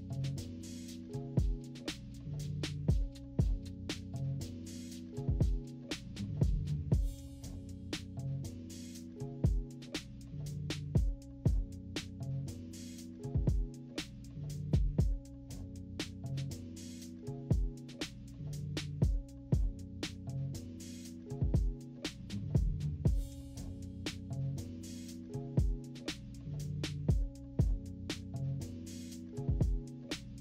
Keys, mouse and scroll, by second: 0.2 click, 0.5 click, 0.7 click, 0.8 click, 1.1 click, 1.4 click, 1.8 click, 2.2 click, 2.7 click, 3.3 click, 3.7 click, 4.0 click, 4.5 click, 4.9 click, 5.4 click, 5.7 -, 6.0 =, 6.4 click, 6.9 click, 7.3 click, 7.6 click, 8.9 click, 9.7 click, 11.0 click, 11.4 click, 12.0 click, 12.7 click, 13.1 click, 13.2 click, 13.5 click, 13.8 click, 14.0 click, 14.7 click, 15.4 click, 15.6 click, 15.9 click, 16.3 click, 16.8-19.0 typing, 17.4 scroll up 2, 17.5-18.0 scroll down 4, 19.4 click, 19.8 click, 20.1 click, 21.4 click, 21.8 click, 22.3-24.0 drag, 24.4 -, 24.7 =, 24.8 =, 25.5-27.6 drag, 27.6 -, 27.8-28.6 scroll up 4, 27.9 =, 28.6 click, 30.0 click.